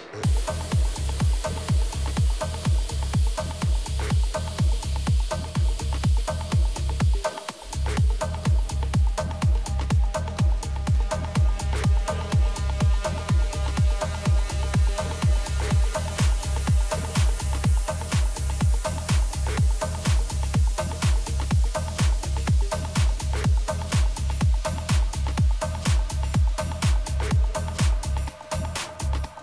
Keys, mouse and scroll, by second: 3.9 a, 4.4 right click, 5.2-6.2 middle drag, 6.9-8.7 drag, 8.8 a, 9.4-11.3 right drag, 10.2-11.9 drag, 11.3 middle click, 12.1 middle click, 12.5-14.5 right drag, 13.8-15.5 drag, 16.0 a, 16.4-18.9 middle drag, 18.6 Tab, 19.3 middle click, 26.1 a, 26.8 middle click, 28.6-29.4 right drag.